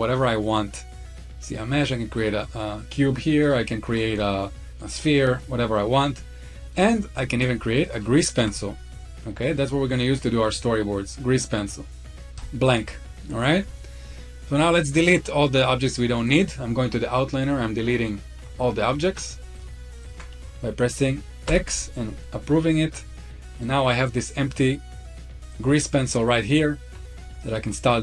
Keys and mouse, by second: 2.6 middle click, 3.1 shift+right click, 3.6 shift+a, 5.2-5.9 middle drag, 6.2-6.5 shift+middle drag, 6.9 shift+right click, 8.2 shift+a, 18.6 shift+click, 19.8 ctrl+click, 21.2 x, 22.7-23.4 middle drag, 25.9-26.9 middle drag, 27.1-27.9 shift+middle drag.